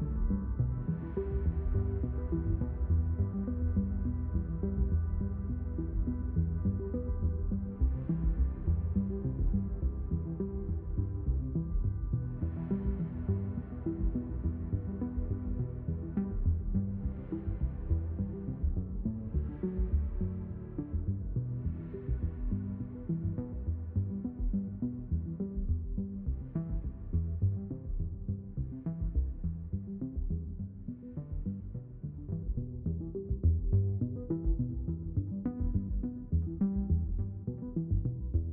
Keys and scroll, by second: 1.0 ctrl+z, 1.9 shift+q, 4.0 3, 4.4 0, 7.3 ctrl+z, 8.8 ctrl+z, 18.6 ctrl+z, 22.3 Return, 24.9 0, 25.0 Return, 28.6 ctrl+z, 33.9 ctrl+z.